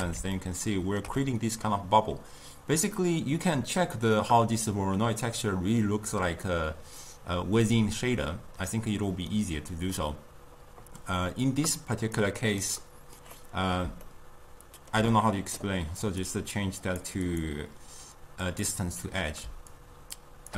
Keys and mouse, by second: 0.5-7.7 ctrl+middle drag, 13.5-18.7 middle drag, 18.7-20.5 drag.